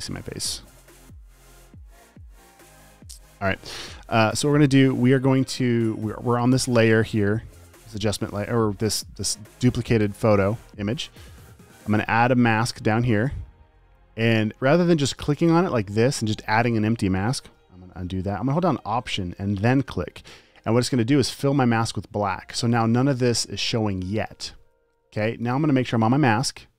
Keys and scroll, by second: 17.9 super+z.